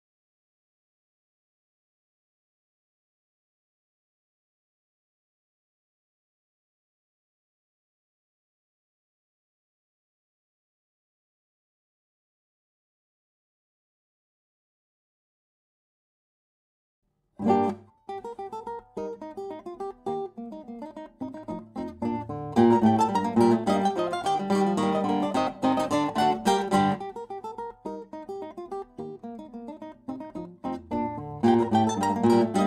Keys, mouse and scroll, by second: 1.7 Tab, 4.2 r, 5.9 Tab, 7.5-9.7 drag, 20.1-23.0 right drag, 21.2-23.5 drag, 23.2-25.4 right drag, 24.5 s, 29.6-31.9 drag.